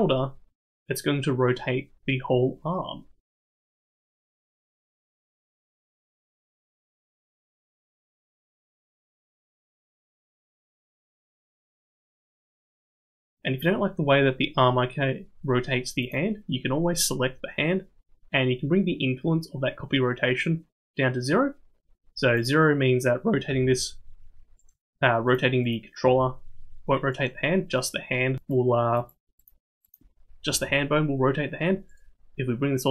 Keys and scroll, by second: 5.9 g, 7.7-13.3 typing, 23.4 r, 26.0 r, 30.5 r.